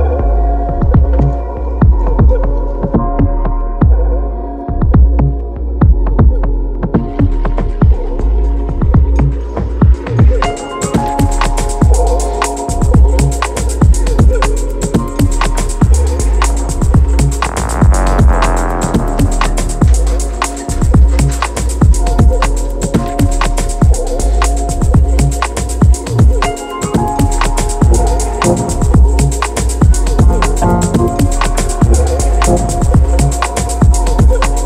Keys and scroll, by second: 0.6 ctrl+d, 0.8 ctrl+l, 15.4 7, 16.8 shift+c, 20.3 x, 20.8 x, 26.3 shift+v, 26.6 r, 27.1 BackSpace, 27.2 Return, 28.5 space, 28.5 l, 28.7 Return, 30.3 ctrl+shift+a.